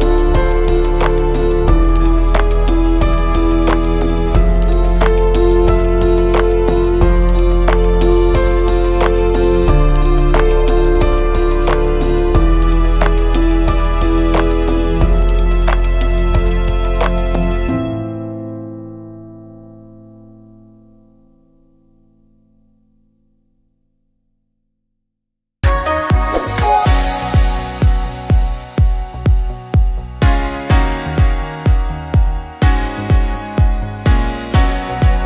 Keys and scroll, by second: 1.8-3.6 typing.